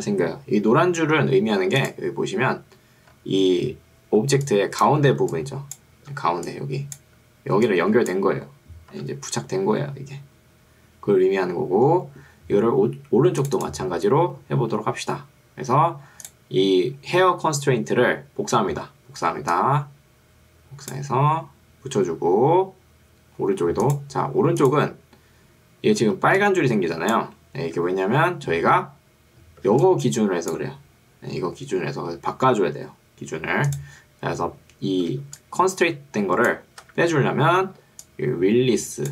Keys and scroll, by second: 0.7 Escape, 5.3 ctrl+2, 8.9 Escape, 26.1 ctrl+2, 27.9 Escape, 29.7 ctrl+2, 31.3 Escape, 35.3 ctrl+2, 36.9 Escape, 37.9 ctrl+2.